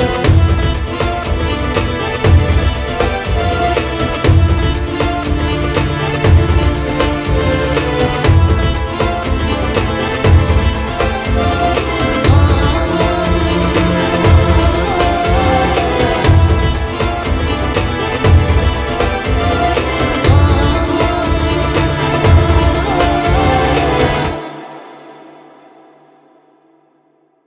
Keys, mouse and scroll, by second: 0.3 middle click, 0.7-1.2 drag, 1.6 click, 1.7-2.1 middle drag, 2.1 shift+d, 3.0-4.4 drag, 4.4 KP_0, 4.9 scroll down 3, 5.1 g, 6.1 click, 7.5 middle click, 7.8 g, 9.0 middle drag, 9.1-12.0 typing, 9.4 middle click, 9.9 click, 10.8 middle drag, 13.2 g, 14.1 ctrl+s, 15.7-17.5 drag, 17.5 ctrl+s, 17.8 click, 19.3 click, 19.4 n, 20.0-21.2 drag, 22.1 ctrl+s, 22.8 click.